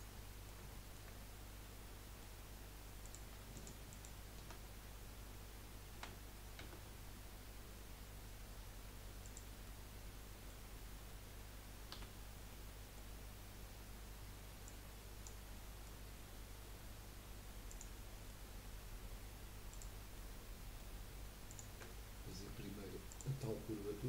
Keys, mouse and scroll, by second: 0.2-3.0 middle drag, 3.0 click, 3.5 alt+shift+click, 3.9 alt+shift+click, 5.9 e, 9.6-11.9 middle drag, 11.9 f, 12.2 scroll down 2, 12.5-14.6 middle drag, 14.6 click, 15.5-17.7 middle drag, 17.7 click, 18.1 middle click, 18.6 scroll up 1, 19.7 click, 20.1-21.5 middle drag, 21.5 shift+click, 21.9-23.1 middle drag, 23.1 shift+click.